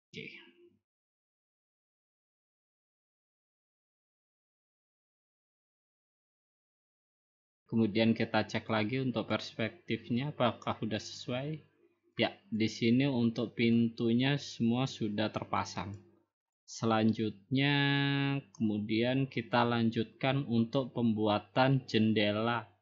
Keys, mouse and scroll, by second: 0.3-1.0 scroll down 5, 1.3 scroll up 2, 4.9 scroll down 1, 5.4-6.0 scroll up 1, 6.1 middle click, 9.4-10.6 drag, 12.1-13.3 drag, 13.7-15.2 drag, 15.6-16.6 drag, 17.0-17.5 scroll down 7, 17.5-18.3 scroll up 4, 19.6 click, 20.0-20.6 scroll up 3, 20.9-21.2 scroll down 5, 21.2-21.6 scroll up 5.